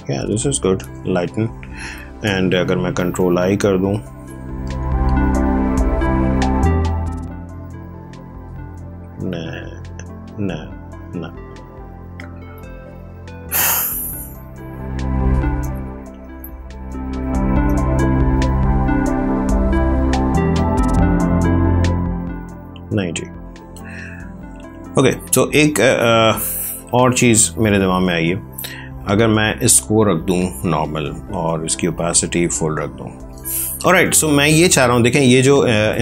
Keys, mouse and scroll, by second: 2.8 ctrl+i, 6.6 click, 9.2 ctrl+z, 11.9 ctrl+space, 12.5 ctrl+click, 12.6 ctrl+space, 14.3 space, 16.2 ctrl+space, 16.7 ctrl+click, 16.9 ctrl+space, 18.6 click, 25.8 click, 28.8 click, 35.8 alt+Tab.